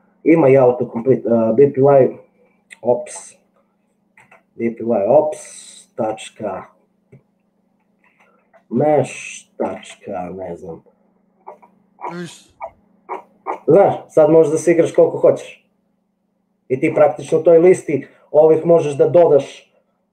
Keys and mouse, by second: 0.6 click, 3.1 BackSpace, 4.4 Tab, 6.2 ., 8.2 m, 8.2 e, 8.4 Tab, 9.7 ., 10.0 Tab.